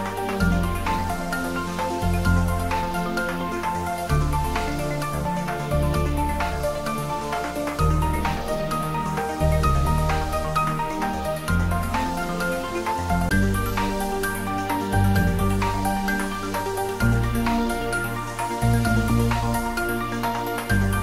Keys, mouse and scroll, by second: 1.1-5.7 drag, 6.5-7.4 scroll down 1, 7.4 click, 13.4 click, 14.9 click, 18.7-20.4 drag.